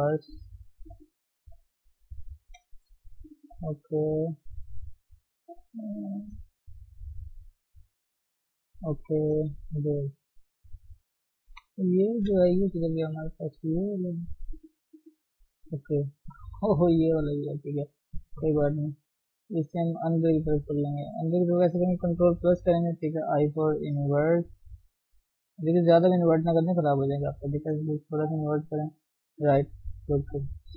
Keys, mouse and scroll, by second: 0.3 click, 0.9 shift+z, 1.3 click, 2.0 shift+z, 2.4 shift+middle click, 2.9 g, 3.6 shift+z, 5.7 g, 6.6 click, 6.7 g, 7.6 shift+z, 7.8 shift+scroll down 1, 7.8-8.9 middle drag, 8.9 scroll down 2, 9.4 KP_3, 9.8 scroll up 1, 10.2 shift+z, 11.1 click, 11.5 shift+z, 12.1 KP_1, 13.2 shift+z, 13.9 shift+click, 14.9 shift+z, 15.1-18.9 middle drag, 18.9 g, 20.6 KP_1, 22.4 ctrl+KP_Add, 26.5 middle click, 27.3 ctrl+z.